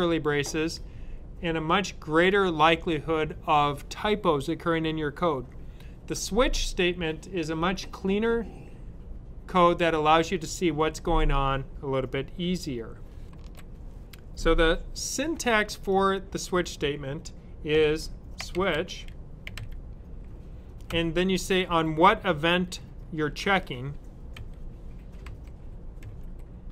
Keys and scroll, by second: 17.6-20.8 typing, 24.3-25.9 typing.